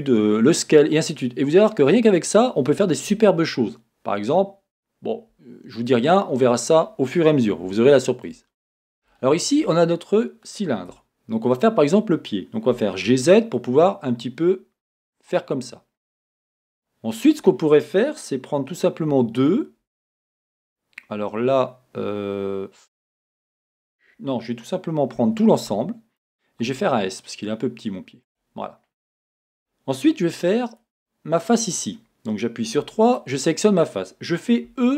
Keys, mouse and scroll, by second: 8.5 scroll, 10.0-11.5 middle drag, 10.0-10.6 scroll, 10.6-10.9 scroll, 10.9 Tab, 11.5 click, 12.8 g, 15.4 click, 16.0-16.4 scroll, 20.1-28.4 middle drag, 23.8-25.2 scroll up 2, 25.2 a, 26.6 s, 28.4 click, 28.6-30.7 scroll, 30.7 click, 31.5 click, 32.8 3, 33.1 click, 34.7 e.